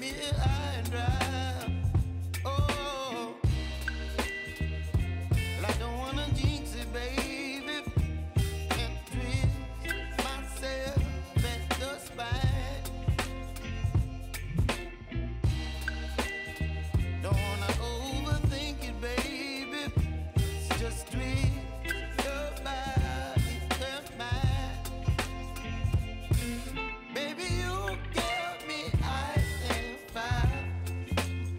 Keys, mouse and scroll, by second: 0.8 [, 2.1 click, 2.7 [, 4.7 click, 6.0 [, 10.0-11.6 drag, 13.0 shift+click, 14.2 [, 15.0 click, 15.7 ctrl+click, 16.6 click, 18.4 [, 20.0 shift+click, 20.7 p, 21.5 click, 22.1 t, 22.5 click, 23.3 u, 24.6 click, 28.0 j, 29.4-31.5 drag.